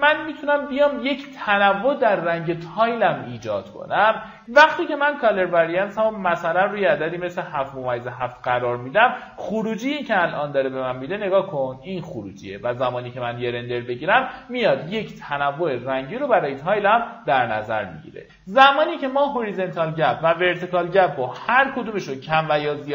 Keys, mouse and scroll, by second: 9.1 right click, 10.0 click, 21.4 KP_2.